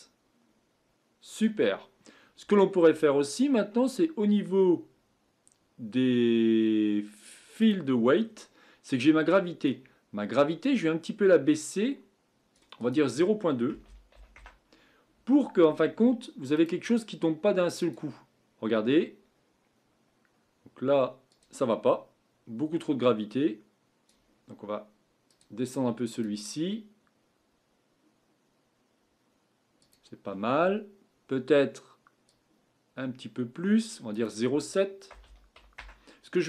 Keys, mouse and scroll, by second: 7.6-8.2 drag, 8.2-8.6 scroll down 6, 9.6-12.6 drag, 12.8-15.8 drag, 16.5-20.9 drag, 21.4-29.3 drag, 30.0-36.4 drag.